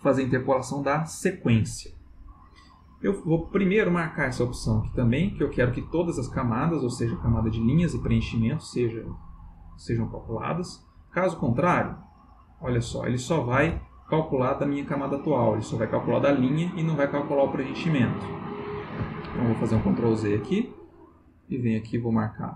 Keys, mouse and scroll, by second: 10.9 click, 12.0 click, 16.1-18.3 drag, 19.2 ctrl+z, 21.3 click.